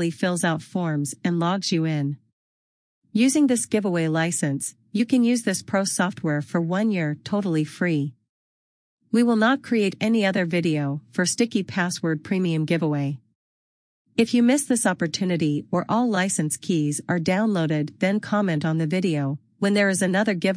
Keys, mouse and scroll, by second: 20.2 click.